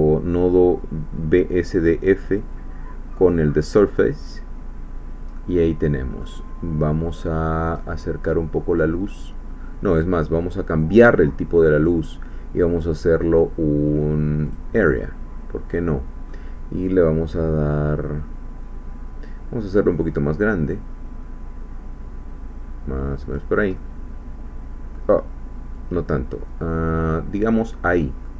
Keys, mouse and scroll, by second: 2.5-4.5 drag, 5.4-6.4 middle drag, 7.8 middle click, 8.7 click, 11.8 click, 14.5 click, 15.0-16.5 middle drag, 19.7-23.5 drag, 23.8-25.1 middle drag, 25.8-27.9 drag, 28.0-28.3 middle drag.